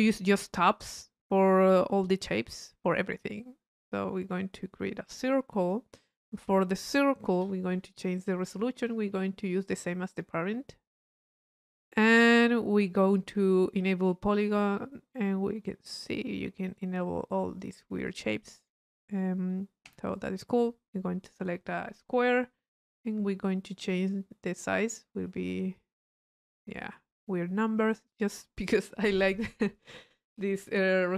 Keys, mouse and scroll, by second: 5.7 click, 6.3 middle click, 6.9 click, 7.3 p, 7.5 click, 8.0 click, 8.8 click, 10.1-11.4 drag, 11.4-13.3 middle drag, 14.3 click, 15.2-17.9 drag, 18.1 click, 20.1 click, 21.4-22.6 drag, 23.4-26.8 middle drag.